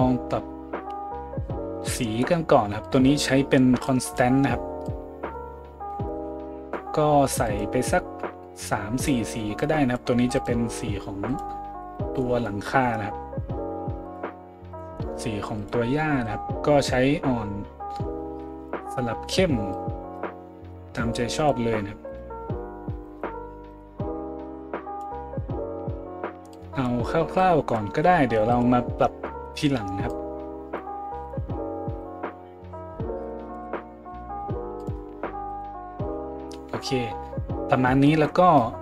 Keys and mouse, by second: 2.8-10.4 drag, 10.4-14.1 middle drag, 14.1-14.8 drag, 14.8-19.7 middle drag, 19.7-22.2 drag, 22.2-26.5 middle drag, 26.5-31.3 drag, 31.3-38.8 middle drag.